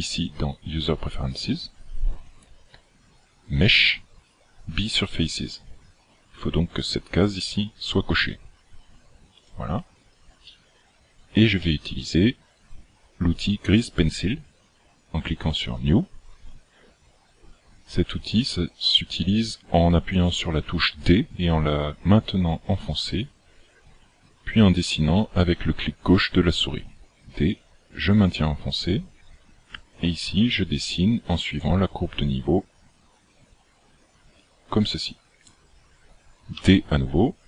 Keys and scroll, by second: 27.3 d, 34.3 d, 36.6 d.